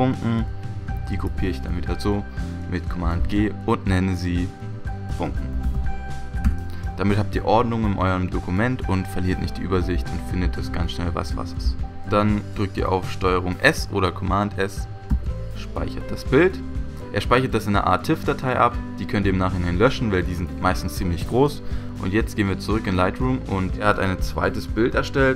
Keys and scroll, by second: 1.7 super+g, 3.4 super+g, 4.8-6.2 typing, 6.4 Return, 15.1 super+s.